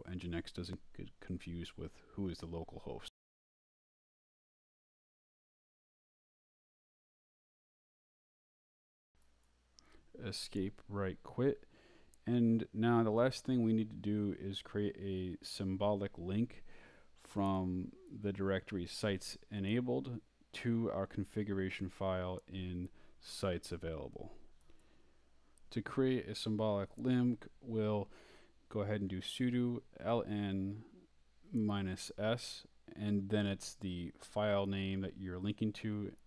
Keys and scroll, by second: 0.7 Left, 3.1 Right, 4.3 d, 5.3 ⟲, 5.9 d, 7.4 Down, 8.6 Escape, 9.1-10.4 typing, 10.6 Return, 12.6-16.1 typing, 16.5 Return, 17.2-18.8 typing, 20.5 space, 21.2 s, 21.7 space.